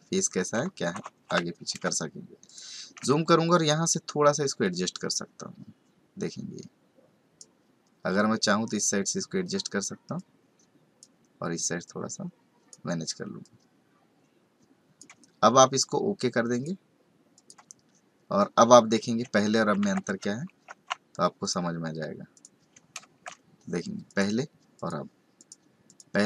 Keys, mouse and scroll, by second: 1.0 ctrl+z, 2.3-3.0 space, 4.9 click, 8.1 click, 10.1 click, 11.8 click, 13.4 click, 16.5 click, 17.3 click, 19.5 ctrl+a, 19.8 ctrl+c, 21.4 click, 22.3 click, 23.0 ctrl+v, 24.0 click, 24.7 click, 25.3 click, 25.8 click.